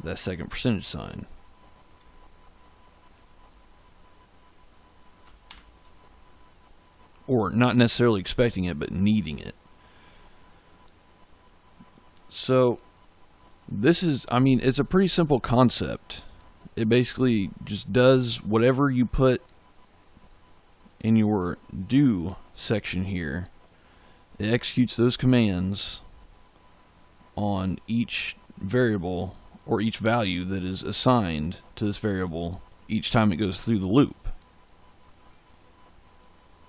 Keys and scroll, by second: 0.4 Left, 5.4 shift+5.